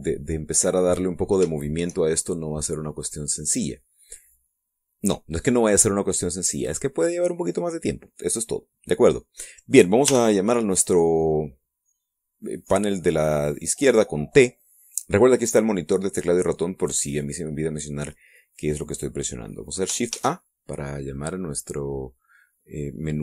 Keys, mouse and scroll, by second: 1.6 scroll up 2, 2.2-4.1 shift+middle drag, 10.7 t, 20.7 shift+a.